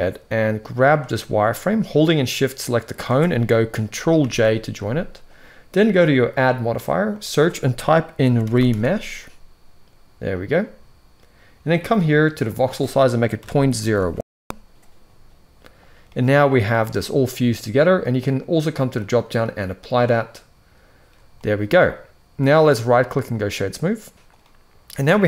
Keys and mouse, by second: 2.3 shift+click, 4.0 ctrl+j, 6.1-10.5 drag, 12.2-14.8 drag, 15.8-16.3 middle drag, 18.7-20.1 drag, 21.0 middle drag, 22.4-23.2 right drag, 24.1-25.2 middle drag.